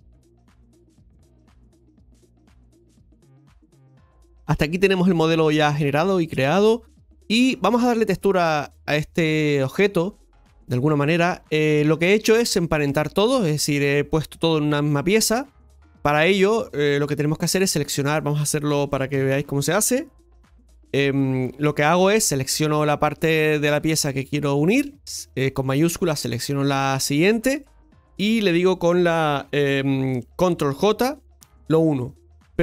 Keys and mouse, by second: 10.8 right click, 11.3 right click, 16.1 right click, 17.2 Tab, 17.8 right click, 19.2 l, 20.9 p, 21.5 Tab, 22.6 right click, 26.0 shift+right click.